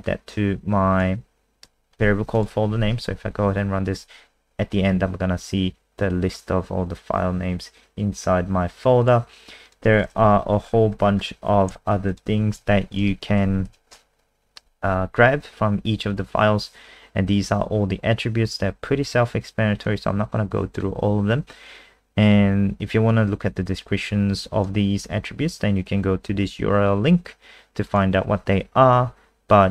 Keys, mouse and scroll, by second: 2.0 ctrl+s, 2.3 click, 2.8 F5, 9.0 click, 10.2 Home, 10.7-12.1 scroll down 8, 12.1 shift+click, 12.6 ctrl+c, 12.9 click, 13.5 ctrl+a, 13.7 ctrl+v, 19.9 click.